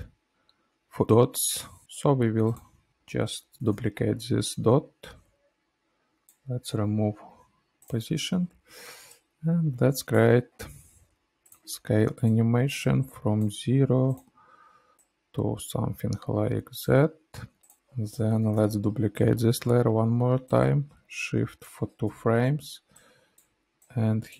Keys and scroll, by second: 3.9 ctrl+d, 6.7 u, 10.6 s, 17.7 ctrl+alt+[, 18.5 alt+], 19.5 ctrl+d, 22.0 u, 23.7 u.